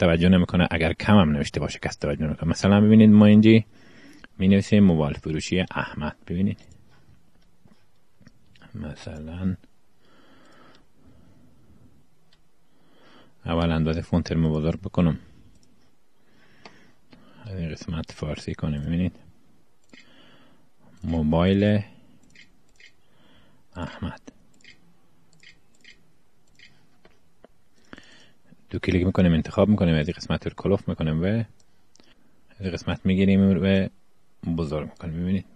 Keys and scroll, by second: 11.7-13.1 typing, 19.4 Pause, 19.5-27.4 typing.